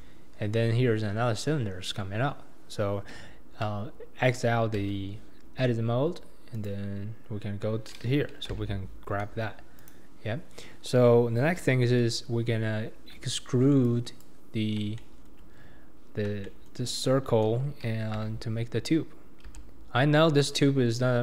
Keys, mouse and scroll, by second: 0.0 p, 4.9 Tab, 6.5 click, 8.6 g, 13.1 Tab, 13.8 click, 14.6-15.0 scroll up 2, 15.0-18.1 shift+middle drag, 18.1 e.